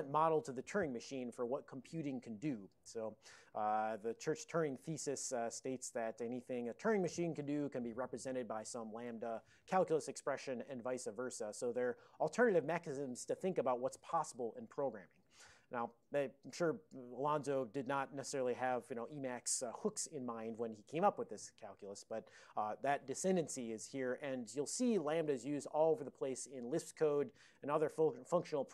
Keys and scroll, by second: 25.5 Left, 25.6 Left.